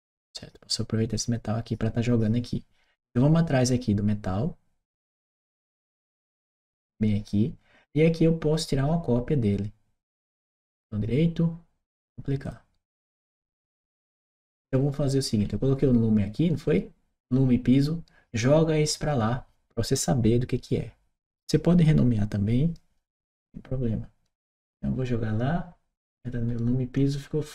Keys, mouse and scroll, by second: 5.8 click, 10.5 right click, 12.2 click, 15.2-15.9 scroll up 1, 26.3 middle click, 26.3 scroll up 2.